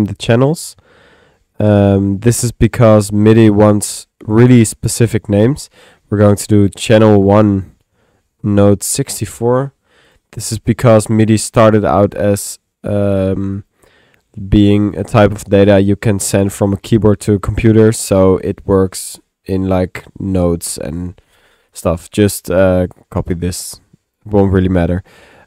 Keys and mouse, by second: 2.2 click, 2.9 click, 5.1-22.1 drag, 23.3-24.5 drag, 24.8 click.